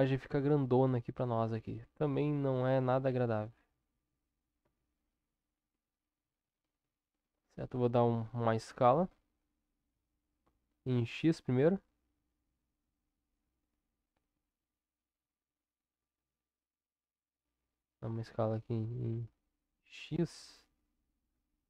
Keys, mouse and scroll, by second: 0.9 click, 3.1 ctrl+KP_7, 4.6 Tab, 8.0 s.